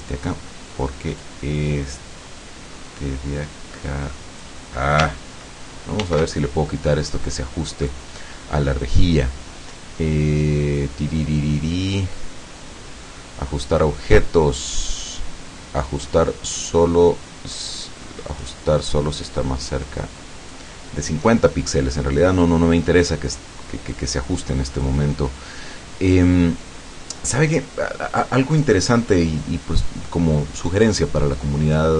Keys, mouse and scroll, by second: 1.3-4.7 drag, 6.0 ctrl+shift+d, 7.9 click, 18.4 click, 19.9 click, 24.0-25.0 drag.